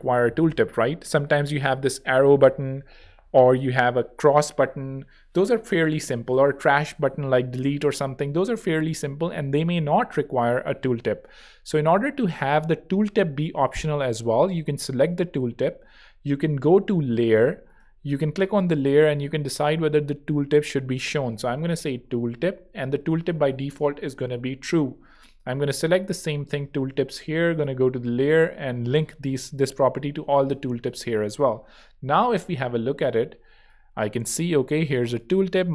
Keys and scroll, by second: 21.3-23.1 typing, 33.5 super+3.